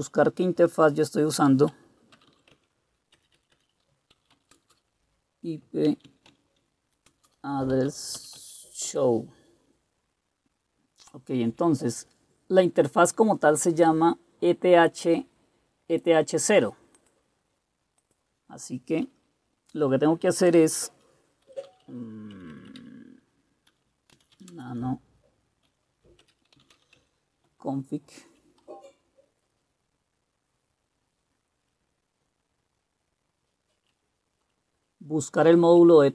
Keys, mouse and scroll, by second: 0.1 BackSpace, 0.7 BackSpace, 0.8 BackSpace, 2.0-8.4 typing, 8.5 Tab, 9.0 Return, 21.3-27.3 typing, 27.6 Return, 28.8 Down, 29.4-33.9 Down, 34.5-35.9 Down.